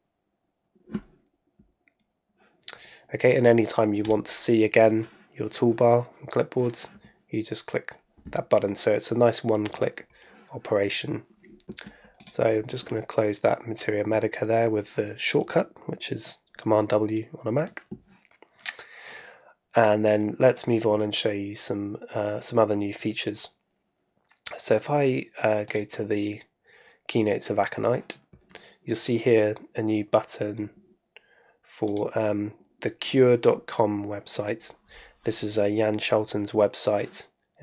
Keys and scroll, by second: 12.4 super+w.